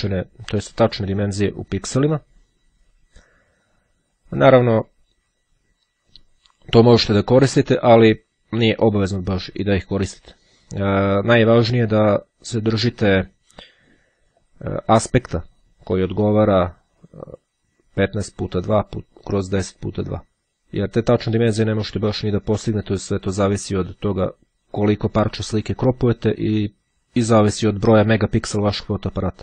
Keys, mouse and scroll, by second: 13.5 click, 16.1-17.9 drag.